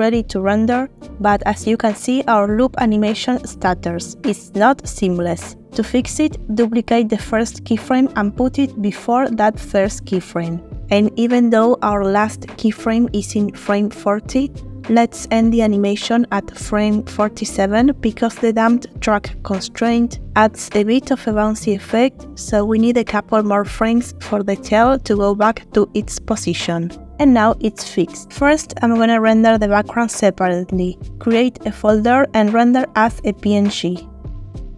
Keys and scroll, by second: 5.2 shift+d, 13.0-13.4 typing, 14.2 Return.